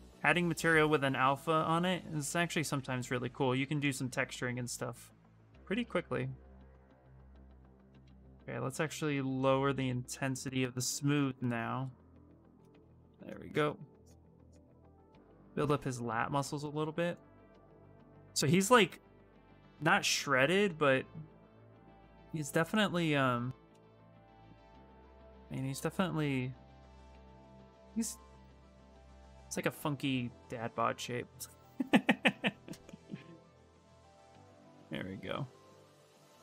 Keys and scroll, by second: 7.3 ctrl+z, 7.5 ctrl+z, 7.8 shift+space, 20.4 s.